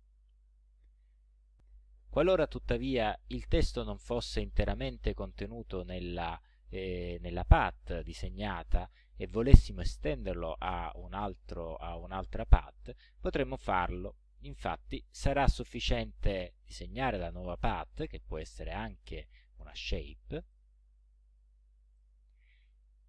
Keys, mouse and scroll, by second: 14.6 click, 15.6-17.0 drag, 20.5 click, 22.0 click.